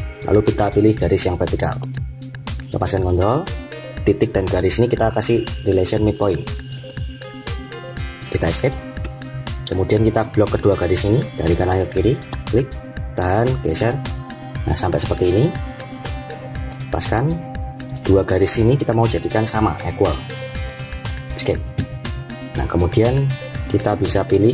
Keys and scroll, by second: 8.4 Escape, 21.1 Escape.